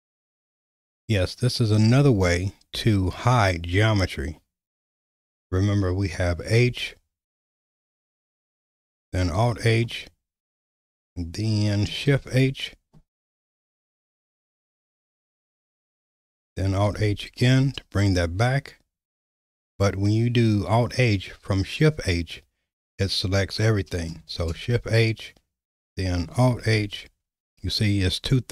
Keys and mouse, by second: 1.9 /, 6.6 h, 7.7 h, 9.3 alt+h, 12.1 shift+h, 15.7 shift+h, 16.9 alt+h, 18.1 click, 24.4 shift+h, 26.5 alt+h.